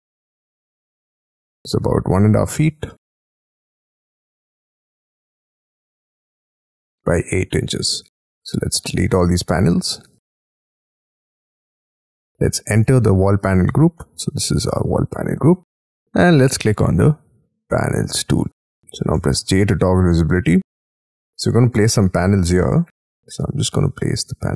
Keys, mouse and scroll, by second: 0.2 Right, 0.6 Left, 1.1 Right, 2.2 space, 2.5 t, 2.9 middle click, 5.6 Up, 6.8 space, 7.0-8.0 scroll down 14, 8.0 Delete, 8.4 scroll down 13, 8.8 middle click, 10.0 Delete, 10.3 scroll down 13, 10.5-10.9 scroll up 7, 11.0 shift+middle click, 11.3 Delete, 11.9 Delete, 12.1 middle click, 13.3 double click, 13.4 double click, 14.0 middle click, 15.5 middle click, 19.3 j, 19.8-20.4 scroll up 13, 20.5-21.1 scroll down 12, 21.2 middle click, 22.0-22.3 scroll up 5, 22.6 shift+middle click, 23.3 scroll up 6.